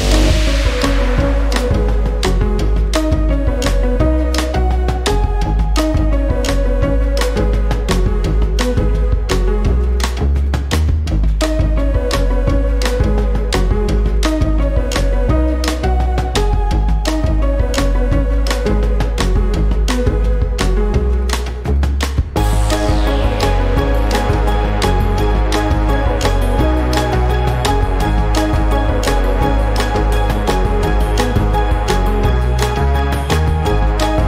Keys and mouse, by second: 0.3 =, 0.7 space, 1.4 click, 1.8 space, 2.3 =, 2.9 space, 3.8 click, 4.9 n, 6.4 click, 10.6-11.8 drag, 12.6 click, 14.2 click, 17.0-18.3 drag, 18.7 click, 20.6 click, 22.7 click, 25.4 ctrl+a, 28.9 click, 30.8 click, 31.6 click.